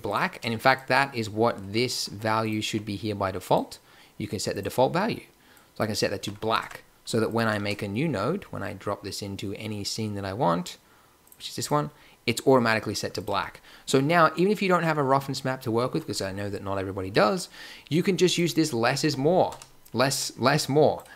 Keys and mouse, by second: 0.1 click, 0.8 Tab, 2.6 n, 6.2 n, 6.5 Tab, 7.5 shift+a, 12.3-13.1 drag, 13.3 x, 14.2-14.9 drag, 14.9 middle click, 18.2-19.9 drag, 20.2 click.